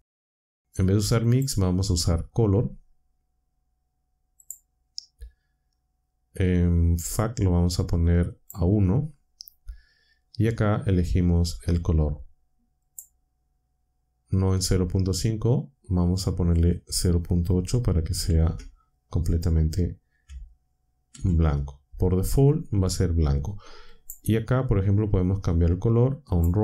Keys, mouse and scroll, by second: 1.2 click, 4.4 click, 6.9-8.6 drag, 12.8 click, 18.2 ctrl+c, 21.1 ctrl+v, 23.9 click, 26.3 click.